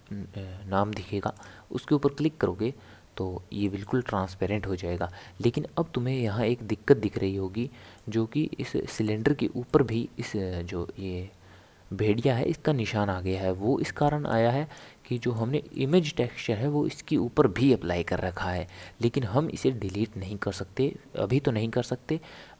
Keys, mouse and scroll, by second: 3.6-9.2 middle drag, 9.7-12.7 middle drag, 14.3 click, 15.2-21.7 middle drag.